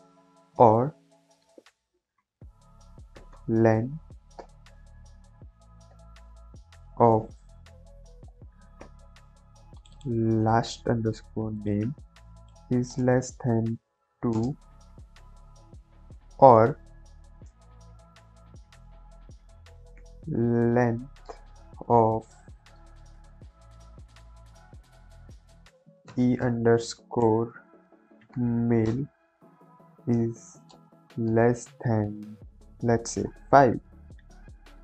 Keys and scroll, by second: 0.5 o, 0.6 r, 1.3 space, 3.1-6.9 typing, 7.2 Left, 7.4 Left, 7.7 Right, 10.3 ctrl+c, 11.9 ctrl+v, 12.8 space, 13.1 shift+,, 14.0 2, 14.2 space, 16.6 o, 16.8 r, 17.4 space, 19.9 l, 21.1 Down, 21.1 Return, 21.8 shift+9, 21.9 shift+0, 22.3 Left, 26.0-28.2 typing, 28.8 Return, 29.6 Right, 30.6 shift+space, 30.9 shift+,, 31.2 space, 33.2 5.